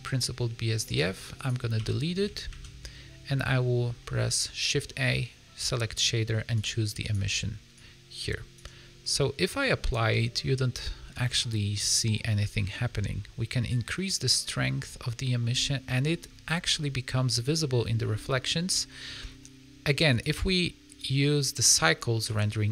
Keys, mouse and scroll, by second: 0.8 click, 1.3 click, 1.8 x, 2.4 shift+a, 7.7 click, 9.0 middle click, 9.6 middle click, 10.0 scroll up 3, 10.3 middle click, 11.0 scroll down 3, 11.2 middle click, 11.5 scroll up 1, 12.6 middle click, 12.8-13.2 scroll up 5, 13.6 click, 15.8 middle click, 17.0 middle click, 19.1 scroll down 2, 20.0 click, 20.8 click.